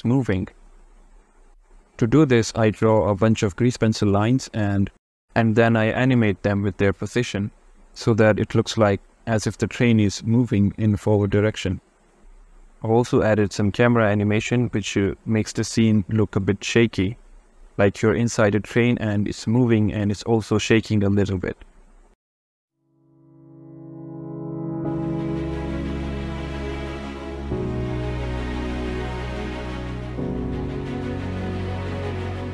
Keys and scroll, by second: 2.6 Return, 3.0 Return, 3.4 Return, 3.7 Return, 4.2 Return, 4.5 Return, 4.8 Return, 5.2 Return, 6.1 Return, 6.5 Return, 6.8 Return, 7.4 Return, 9.1 Return, 9.5 Return, 9.8 Return, 10.4 Return, 10.7 Return, 11.7 Return, 12.5 Return, 12.8 Return, 13.7 Return, 14.2 Return, 14.9 Return, 15.3 Return, 15.7 Return, 16.3 Return, 16.7 Return, 17.0 Return, 17.3 Tab, 17.5 a, 18.0 shift+z, 18.1 shift+d, 19.8 Tab, 20.3 Return, 20.7 Return, 21.0 Return, 21.3 Return, 21.6 Return, 22.0 Return, 22.7 shift+Return, 23.5 Return, 23.9 Return, 24.2 Return, 24.5 Return, 24.9 Return, 25.3 Return, 25.7 Return, 26.4 Return, 27.2 Return, 28.1 Return, 28.5 Return, 28.8 Return, 30.2 Return, 30.4 Return, 30.8 Return.